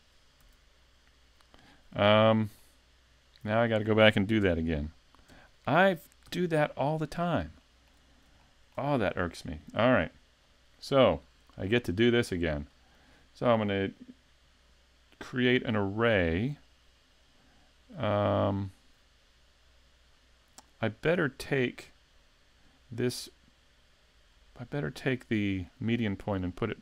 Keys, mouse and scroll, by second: 0.5 a, 2.1 right click, 2.6 middle click, 4.4 KP_3, 5.3 KP_5, 6.3 z, 6.8 shift+middle click, 7.8 shift+middle click, 8.1-8.5 scroll up 2, 8.5 shift+middle click, 10.4 click, 11.7 click, 17.4 click, 24.3 click.